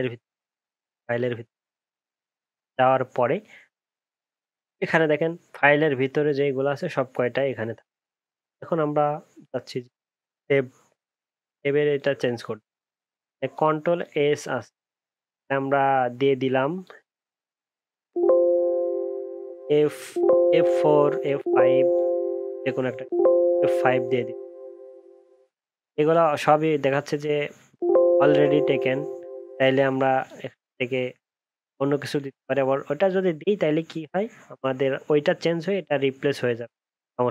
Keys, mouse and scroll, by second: 27.7 ctrl+F5.